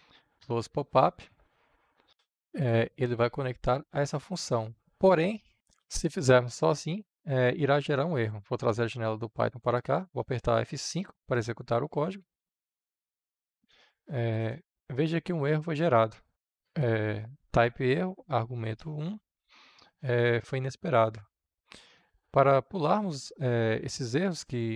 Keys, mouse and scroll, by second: 1.1-12.1 drag, 12.1 F5, 13.1-24.7 drag.